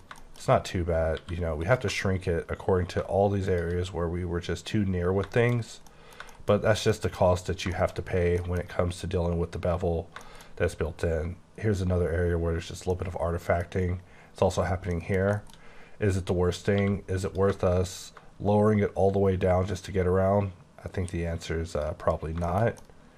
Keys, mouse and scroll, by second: 0.2 middle click, 0.3 scroll down 1, 0.5-0.9 scroll up 10, 1.2 q, 1.6 click, 3.5 shift+click, 4.7-5.7 scroll down 13, 5.3 shift+middle click, 5.9 middle click, 6.2 middle click, 6.3-6.7 shift+scroll down 2, 6.7-7.4 scroll up 6, 6.9 middle click, 7.0 middle click, 7.8 shift+middle click, 7.9 shift+scroll up 2, 8.4 middle click, 10.5-12.0 scroll up 8, 12.0-12.9 scroll down 12, 12.9 middle click, 13.8 scroll up 7, 14.7 scroll down 1, 14.9 middle click, 15.6-16.6 scroll up 10, 16.7 q, 17.2 click, 21.8 click, 22.2 scroll down 8, 22.4 middle click.